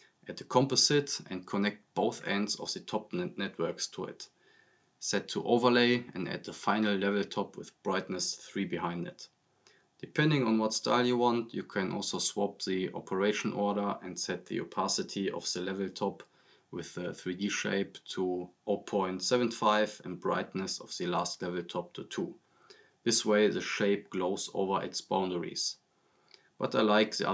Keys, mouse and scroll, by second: 0.1-0.5 scroll up 1, 0.6 click, 2.4 right click, 3.1-4.6 drag, 7.2 click, 8.4 click, 10.5 right click, 10.7 click, 10.9-11.8 typing, 11.8-12.9 drag, 14.7 click, 14.9-15.2 scroll down 1, 15.2 click, 16.7 drag, 20.1-21.0 drag, 22.7 click, 24.2 click, 25.5 click, 26.8 click.